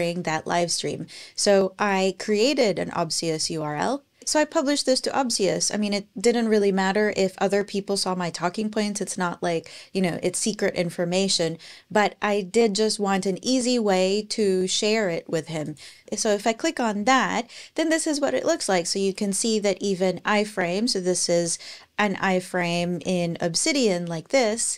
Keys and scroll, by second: 2.1 super+a, 2.5 super+c, 23.0 Page_Down, 24.3 Page_Up.